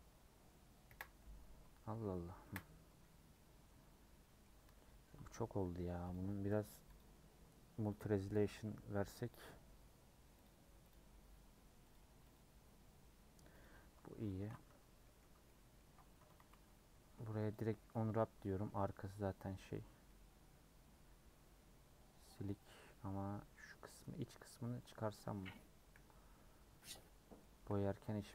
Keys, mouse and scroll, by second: 0.8 KP_Decimal, 1.2 Tab, 2.4 KP_Decimal, 3.4-4.6 middle drag, 4.6 Tab, 7.9-14.3 drag, 14.3 ctrl+a, 15.0 middle click, 15.2 Tab, 15.4 middle click, 15.8 Tab, 16.1 Tab, 16.3 a, 17.5 u, 17.8 middle click, 18.7-19.2 scroll up 3, 20.0-23.1 middle drag, 23.5 scroll up 2, 23.8 middle click, 24.2 3, 24.8 click, 25.2-26.7 middle drag, 26.7 c, 27.0-28.2 middle drag, 28.2 c.